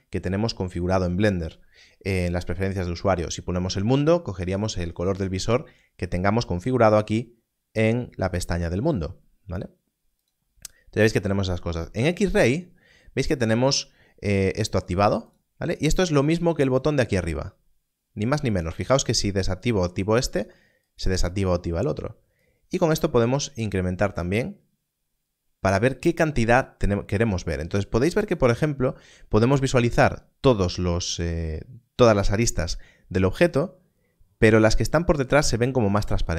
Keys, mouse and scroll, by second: 10.1 click, 14.8 click, 18.4 click.